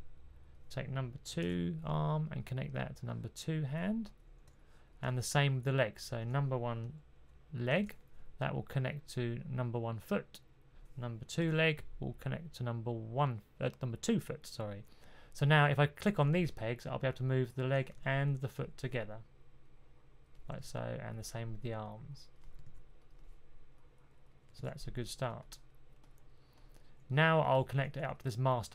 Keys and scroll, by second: 1.3 super+p, 7.6 super+p, 11.3 super+p, 18.1 super+z, 20.5 super+z, 22.5 super+z, 24.4 super+z, 27.9 1.